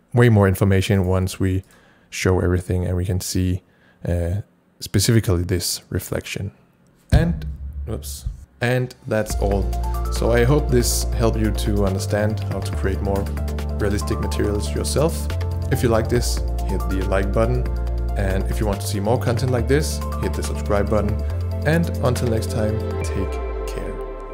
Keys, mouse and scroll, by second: 1.1 right click, 1.1 alt+click, 1.7 alt+click.